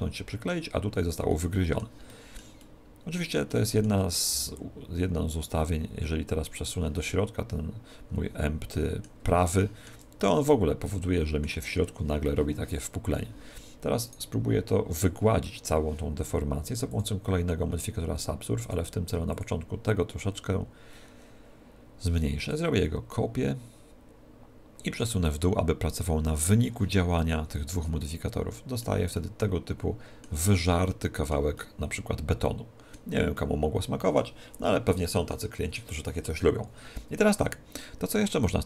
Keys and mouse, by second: 4.4 g, 4.7 middle click, 6.8 click, 7.1-9.0 middle drag, 9.5-12.1 middle drag, 14.2 right click, 16.9-21.3 drag, 22.5 click, 25.3 click, 27.3-28.5 middle drag, 29.0 middle click, 29.3-31.7 middle drag, 32.8-36.7 middle drag, 38.2-38.6 middle drag.